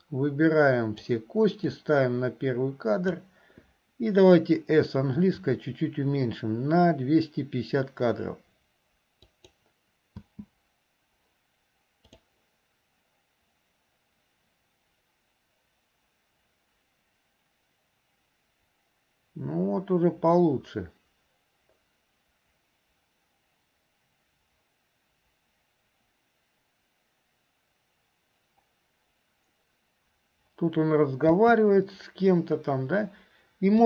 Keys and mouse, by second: 1.9-3.4 drag, 10.5 space, 31.5 space.